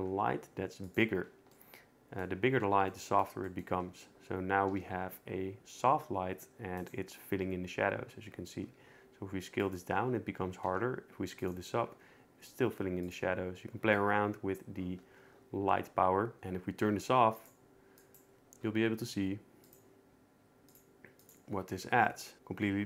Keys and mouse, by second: 0.0 s, 1.5 middle click, 4.7 s, 8.6 s, 10.6 s, 12.6 s, 13.9-16.4 shift+drag, 17.4 click, 18.0 click, 19.6 click, 20.7 click, 21.2 click.